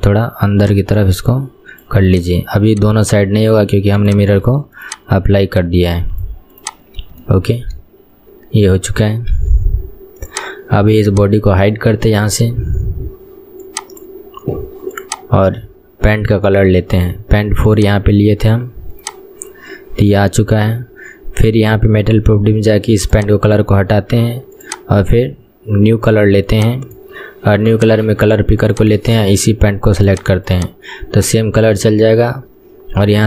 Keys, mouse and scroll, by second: 2.2 click, 4.2 click, 4.9 shift+click, 6.7 click, 6.9-7.4 scroll down 3, 7.4-9.5 shift+middle drag, 9.5 Tab, 9.8-10.4 scroll down 2, 10.4 click, 11.2 click, 15.1 click, 17.8 click, 21.6 click, 23.3-30.1 drag, 31.2 click, 32.2-33.2 scroll down 2.